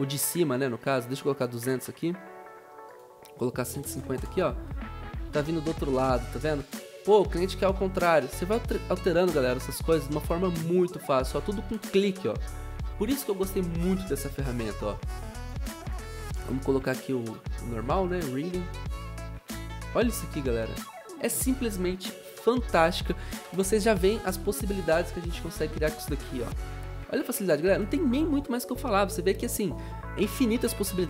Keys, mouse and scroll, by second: 0.2 click, 1.2-1.9 typing, 3.4-4.3 typing, 8.0 typing, 11.3 0, 24.7 0, 27.8 v.